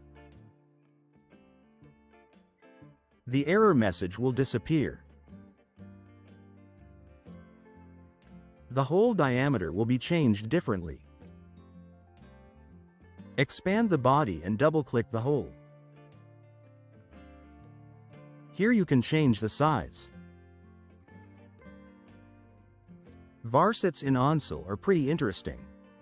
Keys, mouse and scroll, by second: 3.8 click, 5.2-7.3 drag, 8.1 right click, 8.9 scroll up 2, 10.4 scroll down 1, 10.9-11.8 drag, 13.8 click, 15.6 click, 15.8 click, 18.9 click, 20.1 click, 21.2 click.